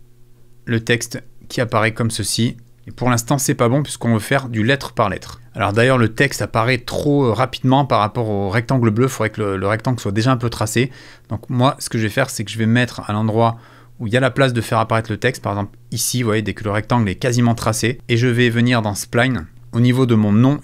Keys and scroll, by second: 0.7 space, 5.7 space.